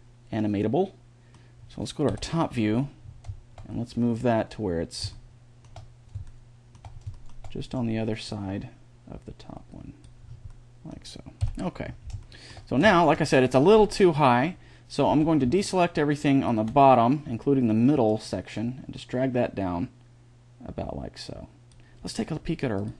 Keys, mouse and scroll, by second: 0.0 middle click, 0.4 middle click, 1.9 KP_7, 4.0-5.4 drag, 5.4 middle click, 8.1 middle click, 8.8-9.8 drag, 10.2-11.2 middle drag, 11.2 KP_1, 14.9 b, 17.9 click, 19.2 click.